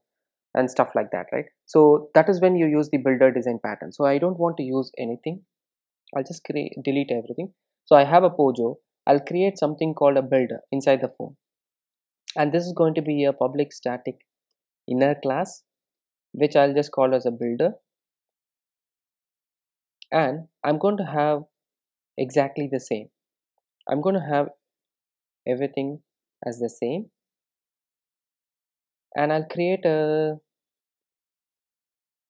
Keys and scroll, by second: 13.1 Return, 25.0 super+c, 26.7 super+v, 30.3 Return, 32.1 Return.